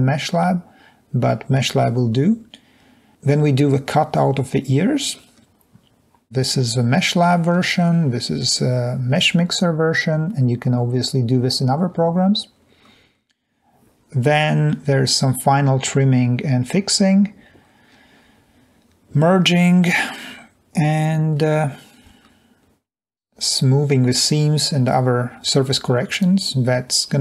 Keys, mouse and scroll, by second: 5.9 scroll down 2, 8.1-8.6 scroll down 2.